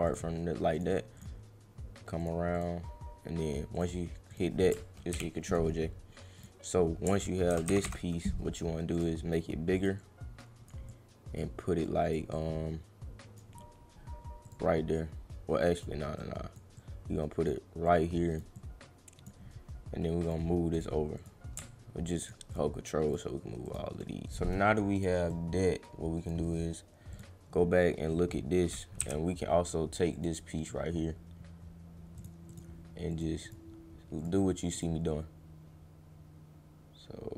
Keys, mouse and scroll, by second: 0.1 click, 0.7 click, 1.1 click, 2.2 click, 2.5 click, 3.7 click, 4.3 click, 6.3 click, 8.9 click, 9.8 click, 10.0 click, 10.9 click, 11.8 click, 12.3-13.3 drag, 14.5 click, 15.6 click, 16.1 click, 16.7 click, 17.8 click, 18.5 click, 20.2 click, 20.7 click, 21.1 click, 22.2 ctrl+click, 22.5 ctrl+click, 23.1 ctrl+click, 23.6 ctrl+click, 25.0 click, 25.3-26.3 drag, 27.1 click, 30.1 click, 32.2 click, 32.5 click, 33.1 click, 33.4 click, 34.2 click, 34.7 click.